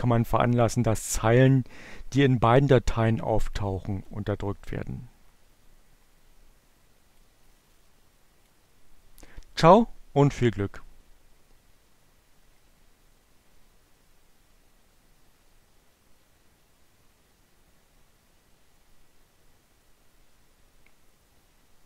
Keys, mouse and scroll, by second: 5.0-9.9 drag.